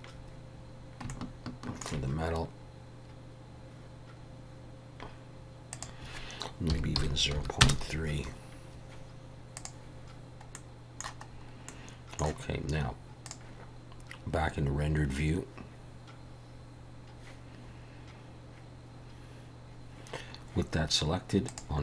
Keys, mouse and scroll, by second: 9.6 click, 10.6 middle click, 11.4 scroll up 2, 11.8 middle click, 13.3 click.